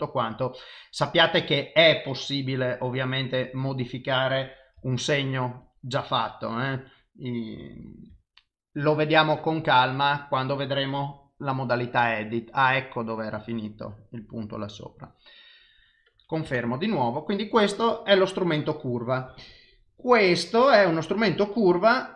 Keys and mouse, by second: 1.0 click, 21.2 click.